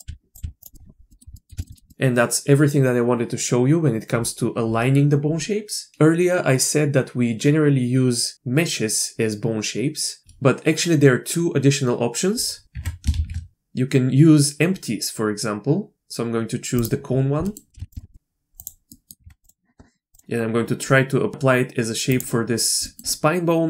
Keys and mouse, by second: 0.0 r, 0.4 r, 1.1 middle drag, 1.3 middle click, 1.6 shift+middle click, 1.7 middle click, 1.9 middle click, 12.6 shift+a, 12.7 Tab, 13.1 shift+a, 17.5 click, 17.7 g, 17.9 shift+click, 18.1 click, 18.9 click, 19.2 Tab, 19.4-20.6 drag, 22.8 click.